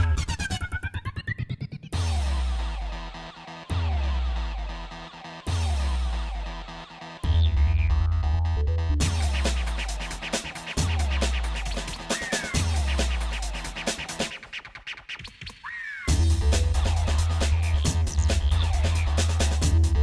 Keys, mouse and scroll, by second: 2.2 click, 2.8 shift+click, 3.3 shift+click, 4.3 g, 8.8 middle click, 9.4 scroll up 1, 10.0 click, 10.4 scroll up 1, 11.3 g, 11.5 scroll up 1, 14.8-16.2 shift+middle drag, 16.4 middle click, 17.0 shift+middle click, 18.0 shift+middle click, 18.6 middle click, 19.8 click.